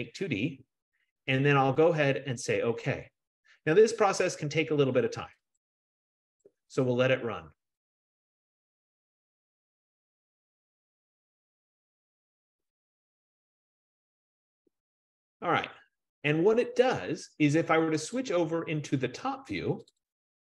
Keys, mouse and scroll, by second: 3.0 F15, 5.7-10.8 drag, 18.4 click, 20.1 click.